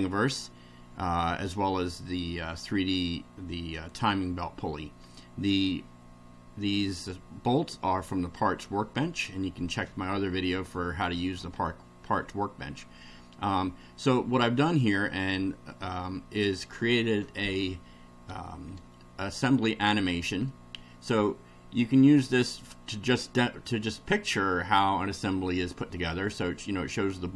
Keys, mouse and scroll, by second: 5.1-5.7 middle drag, 10.5-11.5 middle drag, 11.6-13.6 middle drag, 20.5-26.0 middle drag.